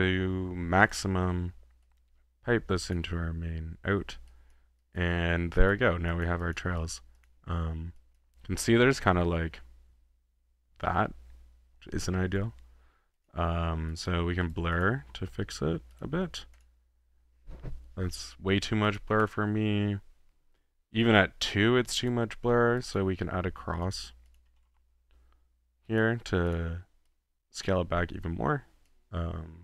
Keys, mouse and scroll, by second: 0.8 scroll down 1, 1.0 middle click, 1.8-3.0 drag, 4.3 click, 5.0 click, 5.6 drag, 5.6 typing, 6.1 drag, 6.6 click, 7.0 click, 7.2 drag, 7.8 typing, 7.9 click, 9.5-11.8 middle drag, 12.4 h, 13.1-13.4 drag, 13.9-14.4 drag, 14.5 click, 14.6 middle click, 14.8 click, 15.0 b, 16.0-16.6 drag, 16.7 click, 17.5 typing, 18.9-19.5 drag, 21.0-22.6 drag, 22.8-23.5 drag, 23.9 middle click, 24.1-25.0 typing, 24.4 click, 26.1-26.5 drag, 26.6-27.8 drag, 28.9-29.6 drag.